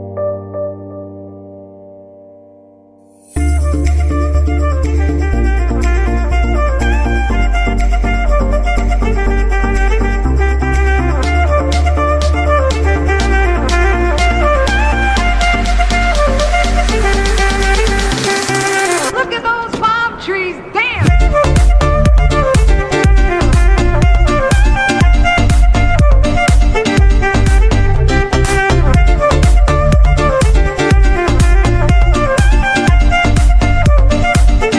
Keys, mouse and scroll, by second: 0.5 ctrl+s, 0.8-1.4 scroll down 2, 1.4-1.9 middle drag, 1.9 scroll up 2, 2.1 middle drag, 3.8 Left, 4.6 Right, 5.6 Left, 6.6 Right, 7.0 Left, 7.6 Right, 7.9 Left, 8.6 ctrl+s, 9.7 scroll down 2, 9.9-10.9 middle drag, 10.9 Right, 12.1 KP_1, 12.8 z, 13.3 scroll up 2, 13.8-16.8 middle drag, 17.1 ctrl+s, 22.6 click, 23.8-26.3 drag, 26.3 scroll down 1, 27.5-30.6 drag, 31.2 KP_Enter, 32.4 click, 33.4 KP_Enter, 34.2-34.7 drag.